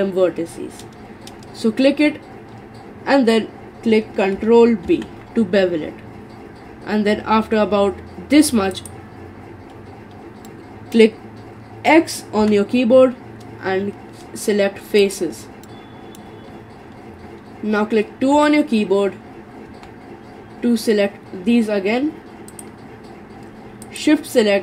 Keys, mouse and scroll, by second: 4.9 ctrl+b, 10.5-12.4 middle drag, 12.4 x, 15.7-18.4 middle drag, 18.4 3, 19.7 2, 22.5 click, 23.8 shift+click.